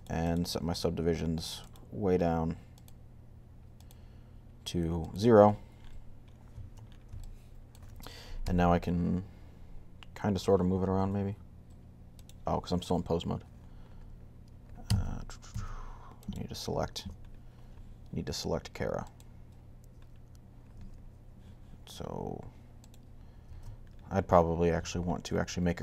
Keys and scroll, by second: 8.2 g.